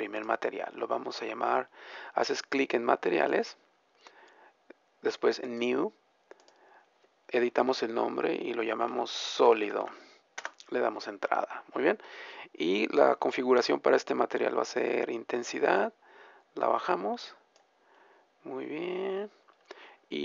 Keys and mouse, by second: 5.4-15.4 drag, 15.6-18.2 drag, 18.2-20.2 middle drag.